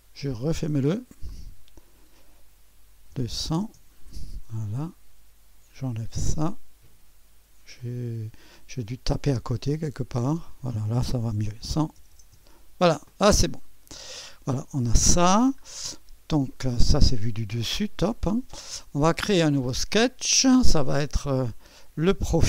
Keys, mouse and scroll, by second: 0.3 click, 1.3 click, 1.4 click, 3.1 KP_2, 3.4 0, 3.6 KP_0, 3.8 Return, 6.0-7.3 drag, 7.3 typing, 7.8-8.9 drag, 9.5-10.6 drag, 11.6-12.4 typing, 13.9-15.0 drag, 15.0-16.0 scroll down 1, 16.0 click, 16.0 typing, 16.8 right click, 19.8-20.9 drag.